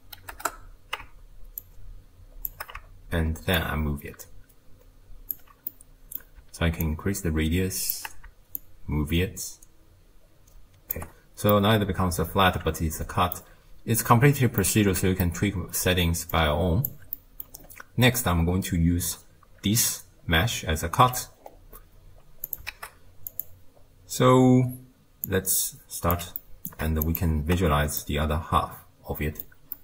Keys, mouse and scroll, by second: 5.7-6.8 middle drag, 6.8-11.6 shift+drag, 11.6-14.6 middle drag, 14.6 middle click, 15.5-16.4 scroll down 2, 16.4 click, 17.2 middle click, 17.6-19.1 scroll down 2, 21.4-21.8 scroll up 2, 22.5 click, 22.7 shift+d, 25.3 click, 26.4-27.3 middle drag, 27.3 ctrl+shift+click, 28.0-29.8 middle drag.